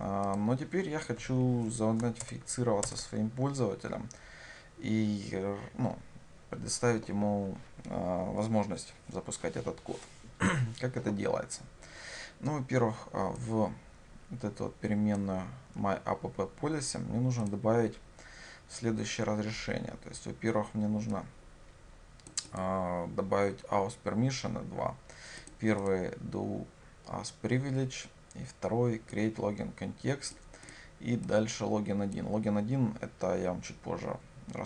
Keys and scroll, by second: 2.3 shift+Return.